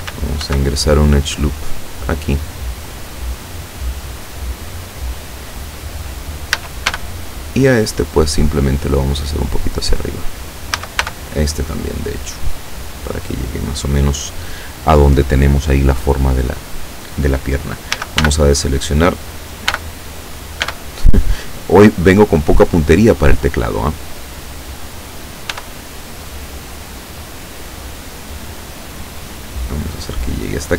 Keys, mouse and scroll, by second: 0.4 ctrl+r, 1.2 click, 2.9 click, 6.6 a, 6.9 b, 7.6 click, 8.8-10.2 drag, 10.8 a, 11.0 b, 11.6 click, 12.6-14.6 drag, 18.0 a, 18.3 n, 19.8 n, 20.7 b, 21.4 click, 23.0-24.9 drag, 25.6 e, 27.8 click, 28.6-30.7 drag.